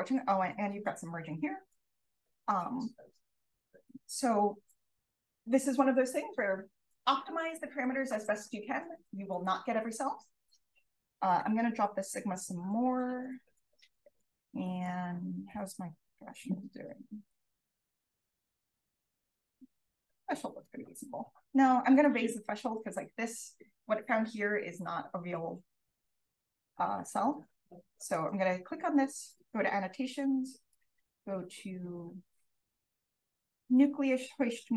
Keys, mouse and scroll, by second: 1.2 scroll up 1, 2.0 click, 3.4 click, 10.5 BackSpace, 10.7 0, 12.5 click, 13.3-14.8 scroll up 2, 14.8 click, 14.8-18.3 scroll up 1, 18.3-18.7 drag, 18.7-19.8 scroll up 2, 19.0 click, 20.4-20.8 drag, 21.0-21.7 scroll up 1, 21.7-26.8 scroll up 1, 21.9 click, 22.2 click, 26.8-27.9 scroll up 1, 27.0 click, 27.2 click, 27.9 click, 27.9-29.3 scroll up 1, 28.1 click, 29.3-30.1 scroll up 1, 30.7 click, 33.6-34.7 scroll up 1.